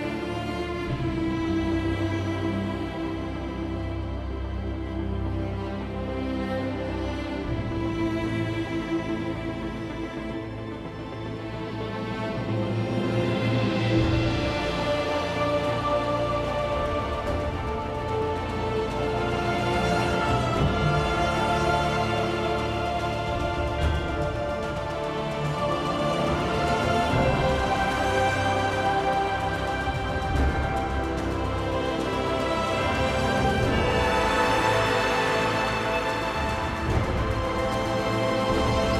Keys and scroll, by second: 2.0 ctrl+1, 2.8 Tab, 3.4-4.8 typing, 23.9 1, 25.4 ctrl+1, 26.5-27.3 typing, 29.0 1, 31.1-33.4 typing, 34.3 ctrl+1.